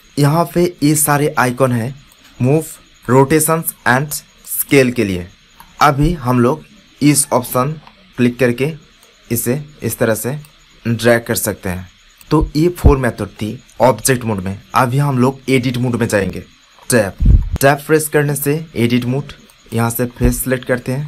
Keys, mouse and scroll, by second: 5.4 middle click, 8.9 click, 12.2-16.2 drag, 16.7 Tab, 17.7 ctrl+Tab, 20.9 right click.